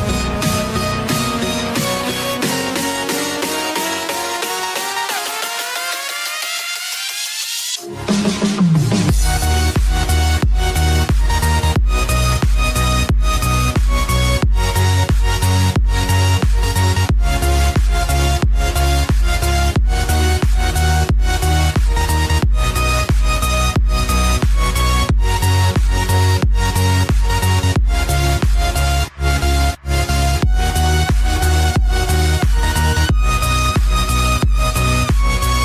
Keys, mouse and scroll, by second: 0.3 ], 1.3 ], 6.0 ], 6.1 click, 7.7-9.1 typing, 7.9 click, 8.4 click, 9.3 click, 10.2 scroll down 1, 10.5-11.3 typing, 10.9 click, 11.4 click, 12.7 scroll down 1, 13.0 ], 13.2 click, 15.4 [, 15.5 click, 19.4 ], 19.6 click, 22.9 ], 23.0 click, 25.1 typing, 27.5 typing, 27.9 click, 29.8 typing, 31.6-32.9 typing, 33.1 click, 34.2 [, 34.3 click, 35.2 [, 35.4 click.